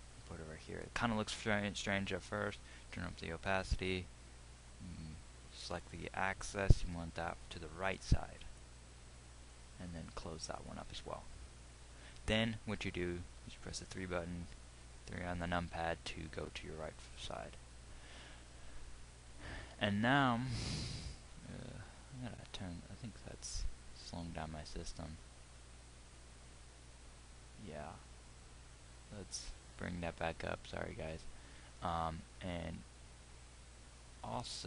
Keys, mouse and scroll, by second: 0.0-9.5 drag, 13.9 KP_3, 25.9-27.9 middle drag, 30.7-34.6 middle drag.